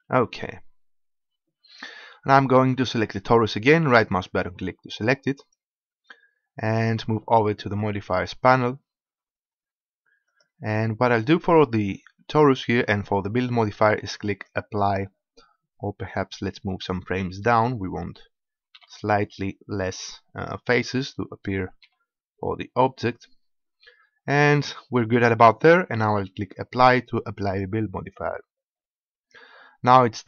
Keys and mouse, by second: 0.6-4.7 drag, 5.4-7.2 drag, 10.4-15.4 drag, 18.8 Left, 21.9 Left, 27.5-30.2 drag.